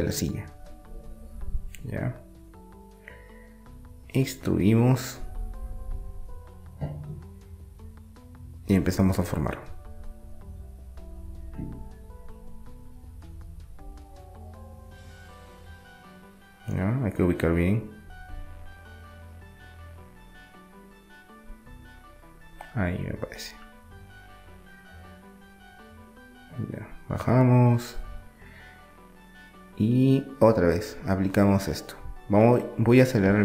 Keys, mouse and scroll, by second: 0.0 middle click, 1.0-3.0 right drag, 3.0 middle click, 5.0-7.2 middle drag, 6.6 e, 7.9-9.7 drag, 10.0-11.9 middle drag, 14.0-15.6 drag, 15.3 KP_3, 16.3 KP_1, 17.6-18.6 middle drag, 19.6-21.3 middle drag, 21.3-23.0 drag, 23.0 middle click, 23.9 e, 25.3-28.6 drag, 28.6 middle click, 29.0 r, 32.9 e.